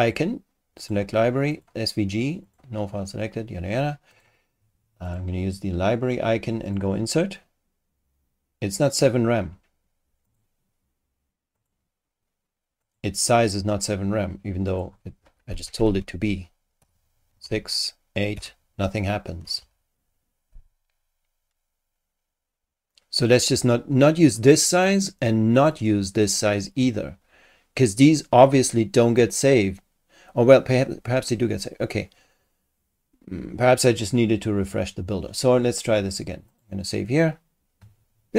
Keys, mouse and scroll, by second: 0.0 click, 0.8 click, 1.5 click, 2.4 click, 4.1 click, 5.1 click, 6.6 click, 10.3 click, 11.6 click, 12.8 click, 14.7 click, 15.6 Home, 15.8 shift+Right, 16.8 6, 17.4 BackSpace, 18.3 8, 19.4 Home, 19.6 shift+End, 24.4 click, 25.6 click, 29.2 click, 36.5 click.